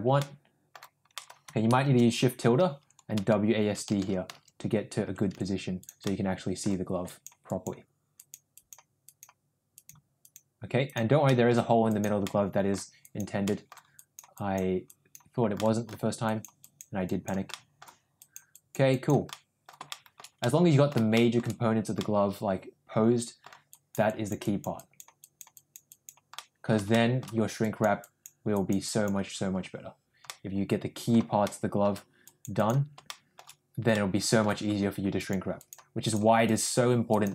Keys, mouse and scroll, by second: 0.1 middle click, 1.2 middle click, 1.7 shift+`, 6.0 middle click, 7.0 click, 7.4 click, 8.1 click, 8.5 click, 9.0 click, 9.7 click, 10.1 click, 10.8 click, 11.2 middle click, 11.8 click, 12.2 middle click, 13.0 click, 13.4 middle click, 13.9 click, 14.3 click, 14.8 click, 15.5 middle click, 16.2 click, 16.5 click, 17.0 click, 17.4 middle click, 18.2 click, 18.5 click, 18.9 click, 19.3 middle click, 19.9 shift+middle click, 20.4 middle click, 21.1 shift+middle click, 21.9-23.4 middle drag, 23.7 click, 24.0 click, 24.4 click, 24.7 click, 25.2 click, 25.5 click, 25.9 click, 26.3 middle click, 26.9 shift+middle click, 27.6 click, 28.0 click, 28.5 click, 28.9 click, 30.2 middle click, 31.4 shift+middle click, 32.1 click, 32.5 click, 33.0 shift+middle click, 33.9 middle click, 35.1 click, 35.5 click, 36.0 click, 36.4 click, 37.0 click.